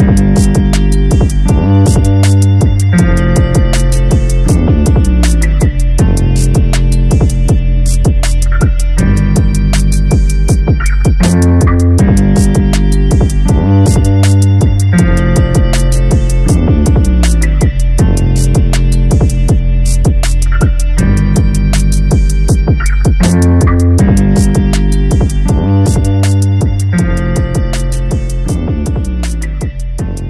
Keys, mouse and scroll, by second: 1.2 e, 2.2 g, 3.2-4.2 middle drag, 4.2-4.7 scroll up 1, 4.7 g, 5.9 middle click, 6.7 2, 6.8 click, 7.6 g, 8.6 alt+s, 9.6-11.7 middle drag, 11.7 g, 13.4 click, 13.7 g, 16.4-17.6 middle drag, 17.6-18.3 scroll up 2, 18.3 g, 19.1-20.3 middle drag, 20.3 2, 20.7 click, 21.7 click, 22.6 alt+s, 24.2-25.7 middle drag, 25.7-26.2 scroll up 1, 26.2 click, 26.7 g, 28.1 click, 29.1 g.